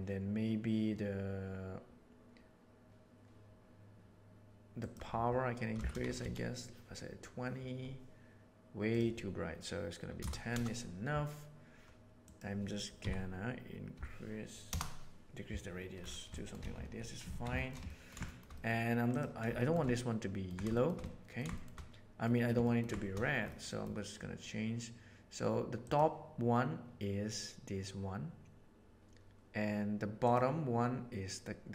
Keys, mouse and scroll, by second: 4.9-11.5 drag, 12.2-15.3 drag, 15.3 middle click, 16.3 shift+middle click, 16.7 a, 17.2 alt+a, 17.8 ctrl+middle drag, 18.2 shift+middle click, 18.5 middle click, 19.0 right click, 19.5 shift+middle drag, 19.9 ctrl+middle click, 20.7 shift+middle click, 21.0 ctrl+middle click, 21.5 shift+middle click, 22.1 middle click, 22.5 ctrl+middle click, 23.6 middle click, 25.7 click, 30.1 click.